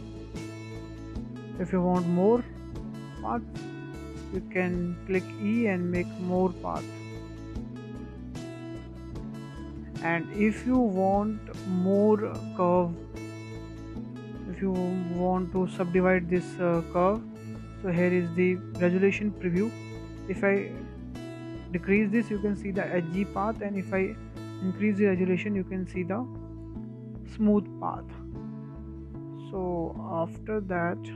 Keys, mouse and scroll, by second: 0.8-1.2 shift+middle drag, 1.2 scroll up 2, 1.7 click, 2.2 e, 4.8 scroll down 1, 5.0-5.4 shift+middle drag, 5.4-6.0 scroll up 2, 6.0 click, 7.9 e, 8.3 scroll down 4, 8.4 click, 8.5 click, 9.2-9.6 shift+middle drag, 9.6 click, 9.8 Tab, 10.1 scroll down 2, 10.3-10.7 scroll up 3, 10.7 shift+middle drag, 11.0 scroll down 3, 11.2-11.8 shift+middle drag, 11.8 click, 12.2-13.8 shift+middle drag, 13.8 click, 14.2 shift+middle drag, 14.4 shift+scroll down 1, 14.5-14.9 scroll up 3, 14.9 shift+middle drag, 15.2-15.5 scroll up 2, 15.5-17.0 shift+middle drag, 17.0 scroll down 2, 17.2-20.2 shift+middle drag, 21.1-24.1 drag, 28.1-28.6 scroll down 7, 28.6-29.0 shift+middle drag, 29.0-29.4 scroll up 2, 29.4-29.7 shift+middle drag, 29.7-30.1 scroll down 4, 30.1-30.6 shift+middle drag, 30.6 Tab, 30.8-31.1 scroll up 2.